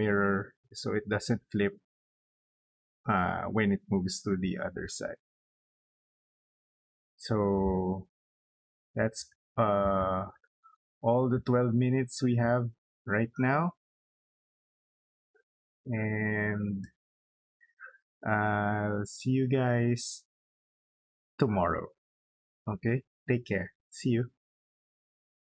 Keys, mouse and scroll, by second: 5.4 click, 6.6 middle click, 7.9 space, 8.9 middle click, 9.6 middle click, 10.4 scroll down 2, 10.9-12.0 middle drag, 12.1 scroll down 2, 12.9 scroll down 2, 13.5 scroll up 2, 13.9 middle click, 14.4 scroll down 2, 15.2-16.4 middle drag, 25.5 click.